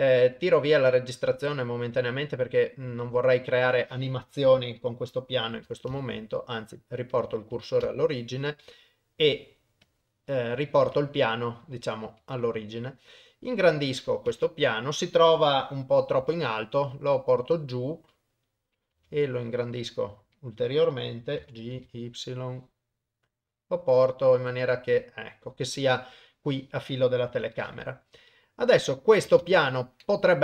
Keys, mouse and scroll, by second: 1.6 click, 2.9 KP_0, 5.9 shift+s, 7.8 shift+s, 11.1 middle click, 12.4 s, 14.3 KP_0, 16.2 g, 18.4 click, 18.9 s, 21.4 g, 27.3 KP_0, 27.7-29.2 middle drag, 29.5 ctrl+s, 29.7 middle click.